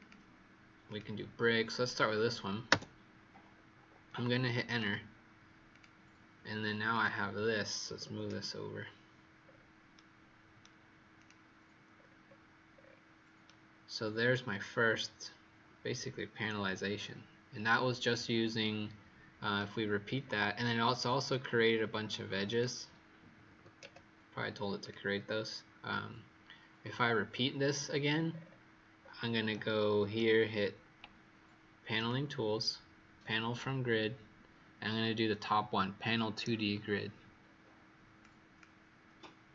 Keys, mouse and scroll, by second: 2.6 Return, 4.6 click, 7.8 KP_5, 7.9 KP_0, 8.2 KP_Enter, 9.3-10.2 scroll down 3, 9.8 right click, 11.1 click, 11.9-12.6 scroll down 4, 12.6-13.3 scroll up 2, 13.3-14.5 scroll up 4, 20.1-20.9 scroll down 2, 21.2 click, 23.4 KP_5, 23.5 KP_0, 23.7 KP_Enter, 24.7 click, 27.6-28.2 scroll down 1, 28.2-28.9 scroll down 1, 28.9-29.4 scroll up 4, 31.9 click.